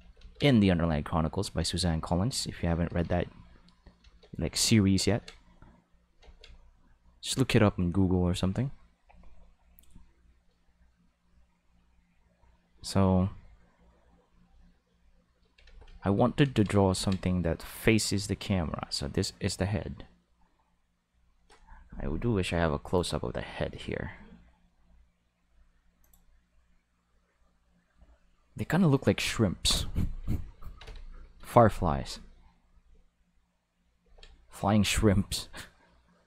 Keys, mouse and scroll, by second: 0.0 ctrl+z, 0.7 click, 1.9 click, 3.2 click, 4.5 click, 5.4 click, 6.6 click, 12.3 click, 15.8 ctrl+z, 16.0 ctrl+z, 17.4 click, 18.3 click, 22.8 click, 24.5 middle click, 25.5 middle click, 26.0 click, 28.9 click, 30.8 ctrl+z, 34.0 ctrl+z, 36.1-36.2 drag.